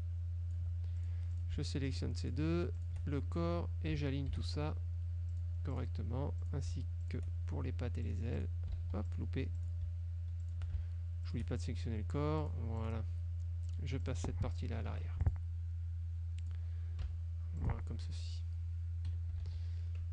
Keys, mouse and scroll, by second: 1.1 ctrl+click, 1.6 ctrl+shift+click, 2.4 shift+click, 2.9 shift+click, 4.4 ctrl+shift+a, 5.4 click, 5.8 click, 6.5 click, 7.1 shift+click, 8.1-8.7 drag, 8.9 ctrl+z, 9.2 ctrl+click, 9.6 ctrl+shift+click, 10.5 shift+click, 11.4 shift+click, 12.5-13.2 drag, 13.8-14.4 drag, 15.0 Page_Down, 15.3 click, 16.6 click, 17.2 Page_Down, 17.7 click, 19.2 KP_Subtract, 19.6 ctrl+s.